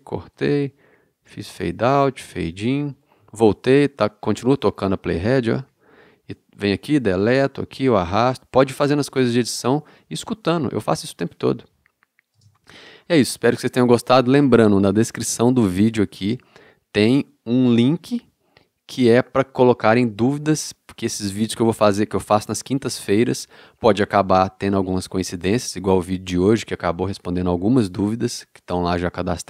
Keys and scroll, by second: 0.4 BackSpace, 7.2 BackSpace, 12.4 space.